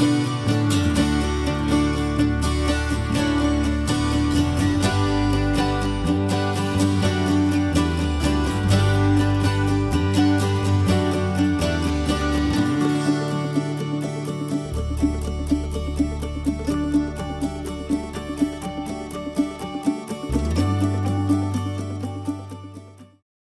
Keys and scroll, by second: 23.3 ctrl+s.